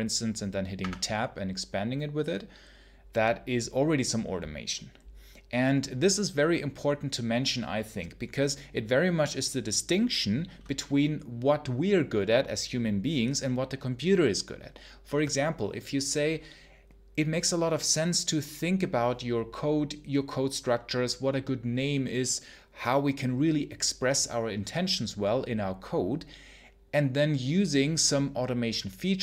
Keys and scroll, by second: 0.6 Tab.